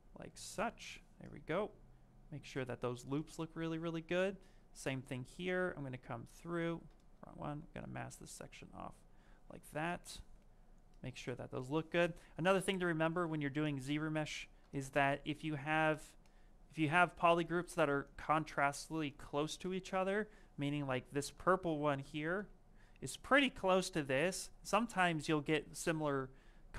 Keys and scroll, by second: 8.4 ctrl+space, 21.2 ctrl+z, 21.6 ctrl+z, 21.9 ctrl+z, 22.2 ctrl+z.